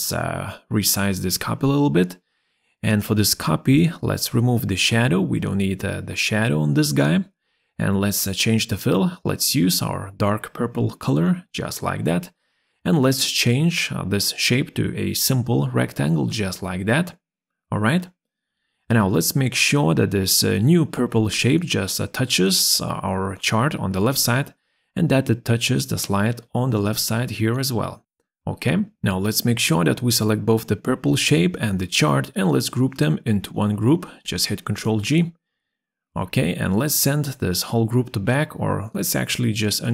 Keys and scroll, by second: 32.2 ctrl+g, 38.9 ctrl+z.